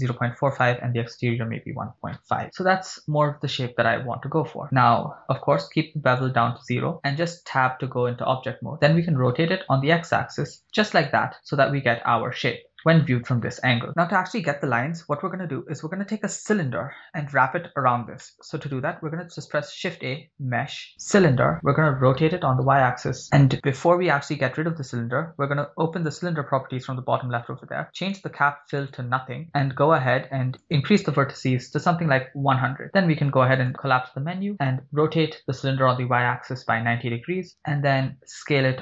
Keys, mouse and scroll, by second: 0.6-2.3 drag, 3.5 click, 6.8 Tab, 9.1 r, 9.3 x, 11.1 click, 12.2 scroll down 2, 12.8 shift+middle click, 18.2-18.5 shift+middle drag, 19.1 shift+a, 22.2 r, 22.8 y, 23.3 right click, 26.0 click, 28.1-28.6 drag, 30.7-32.6 drag, 32.1 0, 33.6 click, 35.0 r, 35.6 y, 36.6 9, 36.6 0, 37.3 Return, 38.2 s.